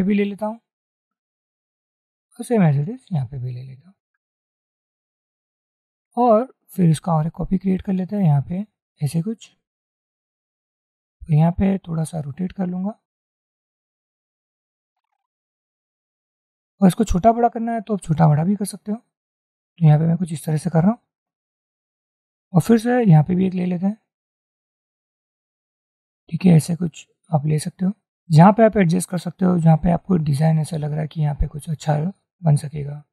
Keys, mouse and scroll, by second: 2.7-5.5 alt+drag, 7.2 alt+click, 25.7 shift+click, 30.4 click, 31.9 click.